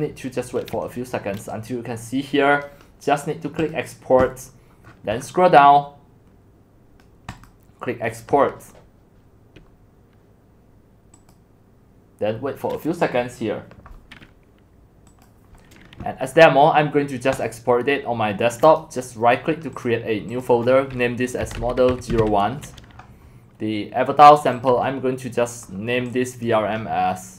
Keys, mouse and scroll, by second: 1.4-2.6 scroll down 2, 2.6-4.8 drag, 4.8-5.3 scroll down 16, 5.3-6.1 scroll up 10, 6.1-6.7 scroll up 1, 6.7-7.5 scroll up 1, 7.5-12.2 drag, 15.1 click, 15.8 click, 17.4 click, 19.7 click, 20.3 click, 21.2-22.7 typing, 24.3 typing, 24.5-26.5 drag.